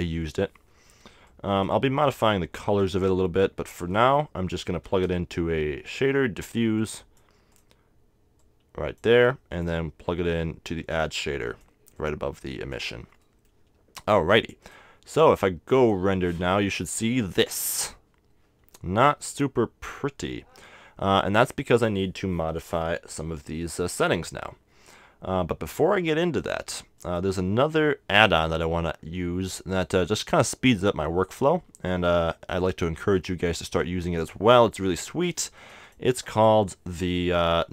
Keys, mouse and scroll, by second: 0.7-2.1 middle drag, 4.8 shift+a, 7.6-13.7 drag, 13.3-14.6 middle drag, 14.6-16.5 drag, 14.6 right click, 17.0 middle click, 19.4-21.0 drag, 20.6-22.4 middle drag, 22.6-24.5 middle drag, 23.4-25.2 drag, 26.4-28.1 drag, 29.7-31.5 drag.